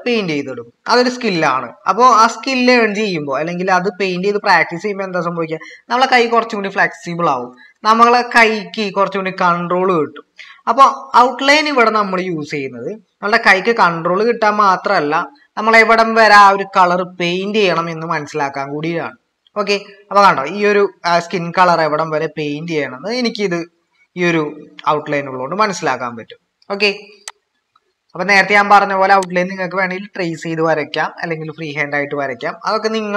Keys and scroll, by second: 7.1-7.7 typing.